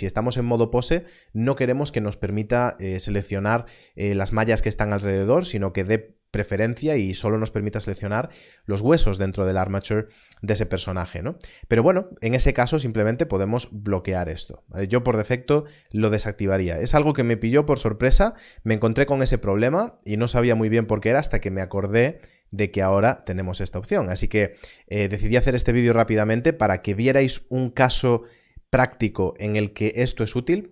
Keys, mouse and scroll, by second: 12.7 click, 22.4 click.